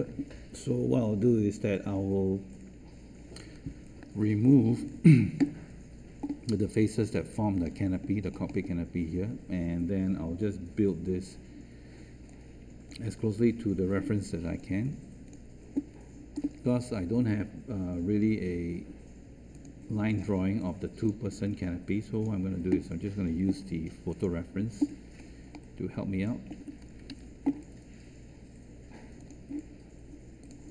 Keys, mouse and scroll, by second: 14.4 space, 21.2 space, 29.1 ctrl+z.